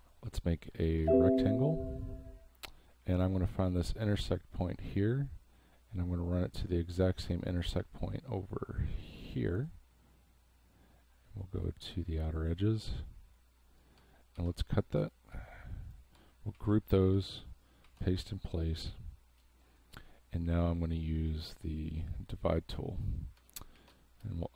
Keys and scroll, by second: 1.1 space, 7.7 v, 14.4 ctrl+x, 15.0 space, 16.5 ctrl+g, 17.8 ctrl+f, 23.7 ctrl+shift+g, 24.2 space.